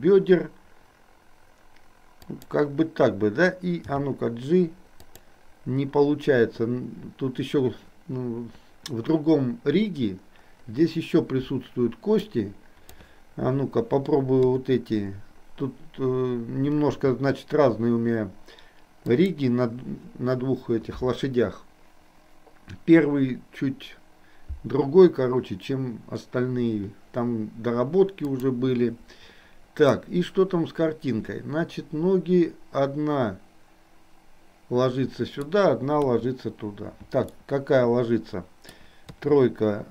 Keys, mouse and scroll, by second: 3.9 g, 12.2 drag, 12.4-13.2 drag, 14.4 KP_3, 16.9 g, 28.4 click, 30.0-35.5 middle drag, 36.0 KP_3, 37.4-38.9 middle drag, 39.2 KP_3.